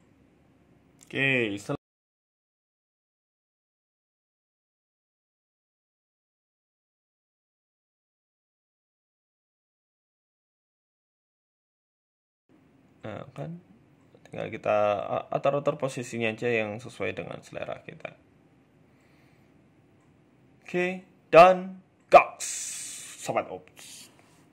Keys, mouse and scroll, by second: 4.9 z, 5.9 click, 7.9 click, 11.7 middle click, 12.1 scroll up 4, 12.9 right click, 13.5 g, 15.6 KP_0.